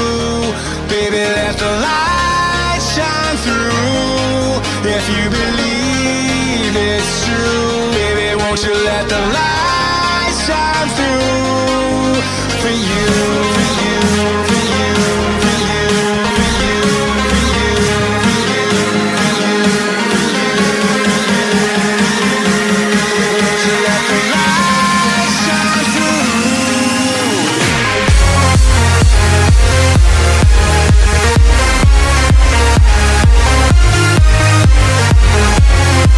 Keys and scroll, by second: 0.9 space, 1.2 x, 2.3 space, 4.7 space, 5.2 ctrl+z, 5.9 space, 6.3 z, 7.5 ctrl+z, 8.5 space, 8.8 x, 10.8 space, 11.1 ctrl+z, 12.7 ctrl+z, 13.9 ctrl+z, 14.3 space, 16.2 space, 16.6 x, 17.1 space, 18.5 space, 19.5 space, 19.9 space, 20.8 space, 23.0 space, 23.5 ctrl+z, 24.6 space, 24.9 space, 25.5 ctrl+z, 25.6 x, 26.6 space, 27.1 space, 27.5 ctrl+z, 32.0 z, 34.4 space, 34.9 space, 35.4 ctrl+z.